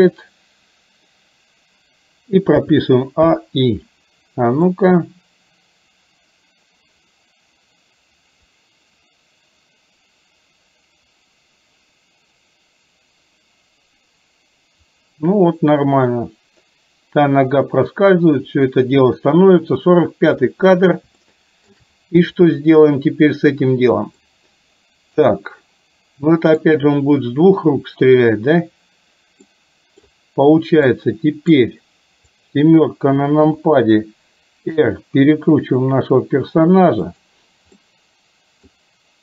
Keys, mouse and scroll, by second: 2.6 a, 3.4 i, 4.9-20.5 drag, 21.3-21.8 shift+middle drag, 24.3-26.8 middle drag, 29.5-30.1 middle drag, 30.9-31.6 middle drag, 32.4 click, 33.5 KP_7, 34.9 r, 37.8-38.8 middle drag.